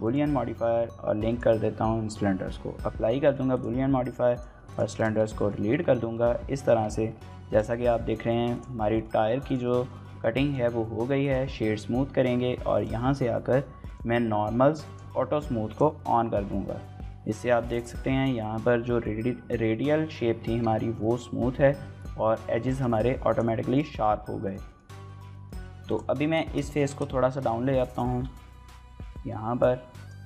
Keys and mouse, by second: 2.7 ctrl+a, 3.2 shift+middle click, 4.1 x, 4.7 click, 5.0 middle click, 5.1 middle click, 5.6 Tab, 6.1 shift+middle click, 6.5 Tab, 7.5 shift+middle click, 7.7 middle click, 8.1 Tab, 8.5 drag, 9.0 shift+middle click, 9.1 middle drag, 9.4 click, 10.1 middle click, 10.6-11.3 right drag, 12.7 click, 14.8 click, 16.0 shift+middle drag, 16.9-17.3 middle drag, 21.0 shift+middle click, 21.4 middle click, 22.7 shift+middle click, 22.9 middle drag, 23.7 shift+middle click, 23.9 middle click, 24.4 shift+middle click, 24.7 middle click, 25.1 shift+middle drag, 25.3 middle click, 25.6 Tab, 25.9 click, 26.5 shift+middle click, 26.7 middle click, 27.0 z, 28.1 g, 28.3 z, 30.0 click.